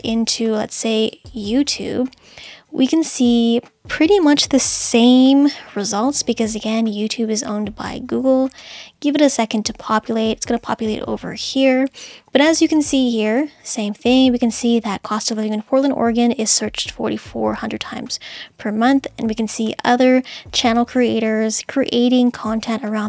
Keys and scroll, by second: 0.0 super+c, 5.0 super+v, 5.8 Return.